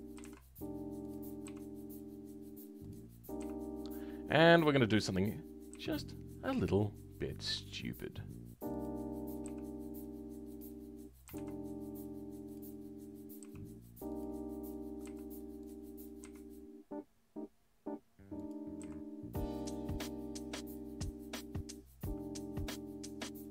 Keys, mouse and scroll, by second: 0.2 s.